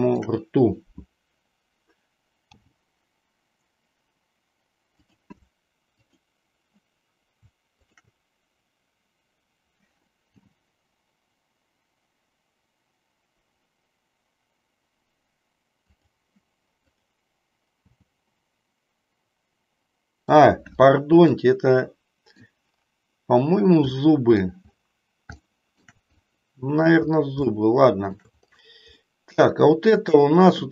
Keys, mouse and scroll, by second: 2.5 g, 5.0 click, 7.8-8.9 shift+drag, 10.3 g, 15.9 click, 17.9 g, 21.4-22.5 middle drag, 24.0 middle click, 25.5 shift+middle click, 26.2 middle click, 27.5 shift+middle click, 29.0-30.0 middle drag.